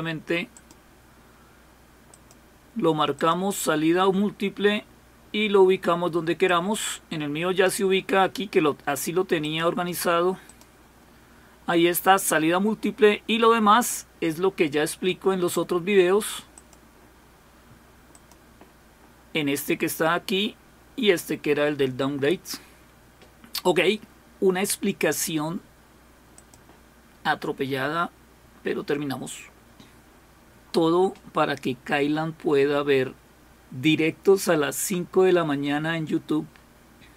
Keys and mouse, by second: 0.5 click, 2.1 click, 3.2 click, 6.5-8.3 drag, 9.4 click, 10.5 click, 16.6 click, 18.1 click, 26.3 click.